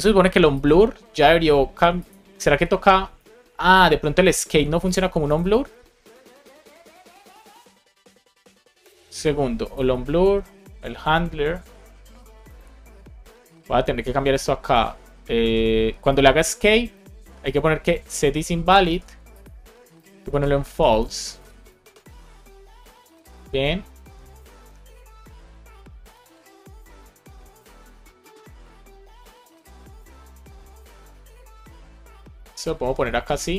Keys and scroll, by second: 18.8 super+c, 19.8 Return, 20.2 super+v, 20.6 Left, 21.9 super+s, 27.3 alt+Down, 28.4 super+s, 32.1 alt+Down, 33.0 super+s.